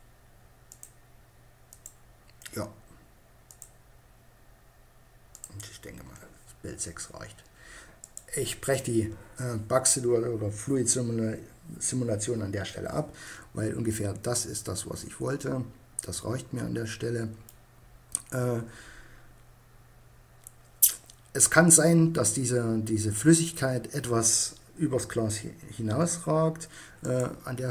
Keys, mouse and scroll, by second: 4.1 middle click, 6.1 middle click, 8.8-12.2 middle drag, 14.1 middle click, 17.6-24.7 middle drag, 26.1-27.7 drag.